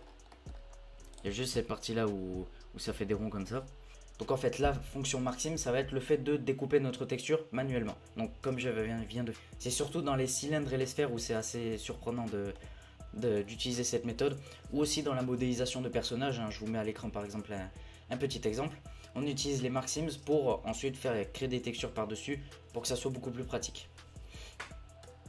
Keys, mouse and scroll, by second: 0.1 scroll down 6, 0.3 middle click, 0.5 scroll up 6, 1.1 alt+click, 1.5-3.9 middle drag, 3.9 Tab, 12.6-13.3 middle drag, 13.3-13.9 scroll up 3, 13.9 a, 14.1 a, 14.2 scroll down 2, 25.0 Tab.